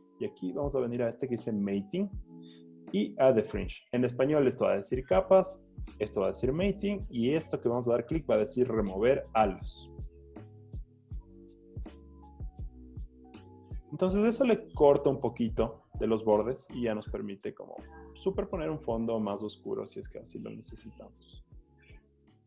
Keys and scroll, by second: 15.9 z.